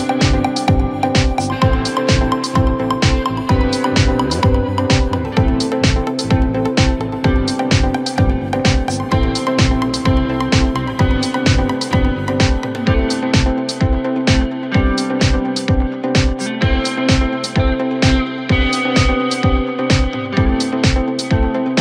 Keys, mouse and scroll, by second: 1.9-2.4 scroll up 2, 2.4-3.7 middle drag, 3.7 Tab, 4.9 click, 7.0 scroll down 2, 7.2-8.6 middle drag, 8.6-9.2 scroll up 1, 9.2 KP_Divide, 9.8 KP_1, 10.3 Tab, 10.9-12.5 scroll up 1, 12.5 Tab, 13.9-17.3 drag, 17.3-17.9 scroll up 1, 17.9 scroll down 2, 18.2 Tab, 19.2-20.3 drag, 21.3 g.